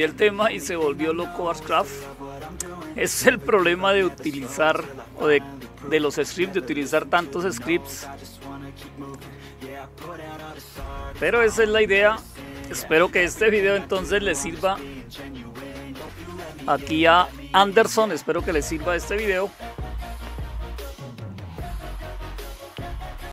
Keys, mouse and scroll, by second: 8.9 click, 10.2 click, 10.9 click, 11.4 click, 11.9 click, 12.6 click, 16.0 super+6, 23.2 click.